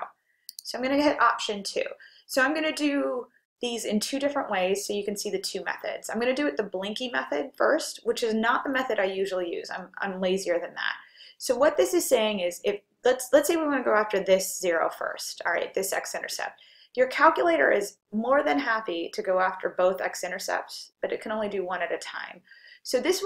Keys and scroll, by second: 0.3-1.0 typing, 16.9-17.7 typing.